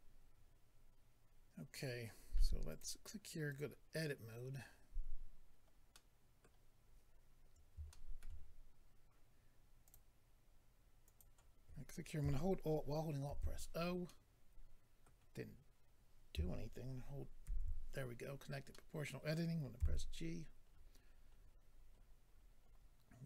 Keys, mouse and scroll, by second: 0.0 click, 2.7 click, 2.8 click, 3.5 click, 3.6 click, 5.9 middle click, 7.4-7.8 scroll up 2, 7.9 shift+middle click, 9.8 click, 9.9 click, 11.0 click, 11.2 click, 14.0 alt+o, 14.0 middle click, 18.7 alt+o, 18.7 middle click, 19.8 g, 20.7 scroll down 4.